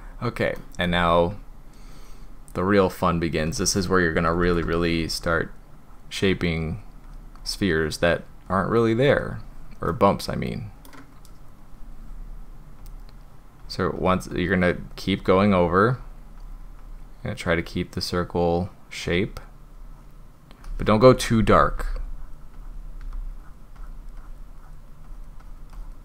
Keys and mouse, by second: 0.6-0.9 shift+middle drag, 4.2 [, 4.4 [, 4.6 [, 5.3 drag, 5.9 drag, 6.3 drag, 6.7 drag, 7.1 drag, 7.4 drag, 7.8 click, 8.2 drag, 8.5 click, 8.8 click, 9.9-10.9 middle drag, 12.8 drag, 13.3 click, 13.6 drag, 14.0 click, 14.3 drag, 14.7 drag, 15.2 drag, 15.5 drag, 16.0 drag, 16.4 drag, 16.8 drag, 17.2 drag, 17.6 drag, 18.1-19.4 drag, 19.8 drag, 21.4 ], 21.6 ], 21.7 ], 21.9 ], 22.1 drag, 22.6 click, 23.0 ], 23.3 drag, 23.8 click, 24.2 click, 24.6 drag, 25.1 click, 25.4 drag, 25.8 drag.